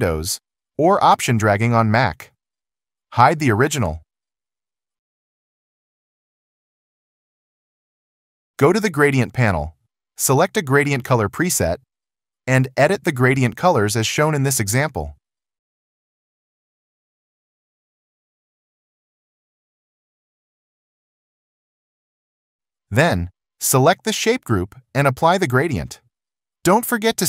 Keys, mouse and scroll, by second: 7.6 ctrl+0.